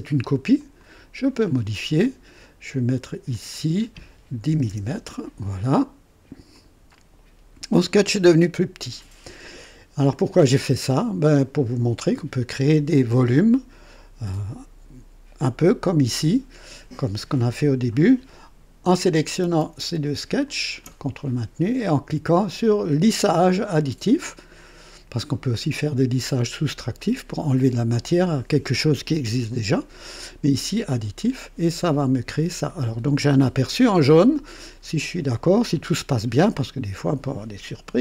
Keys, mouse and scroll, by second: 0.5 click, 3.3 click, 4.5 KP_1, 4.7 KP_0, 4.9 KP_Enter, 4.9 Return, 6.5 click, 7.7-9.1 drag, 20.5 ctrl+click, 30.9 click, 32.5-34.6 drag, 35.7-37.5 drag.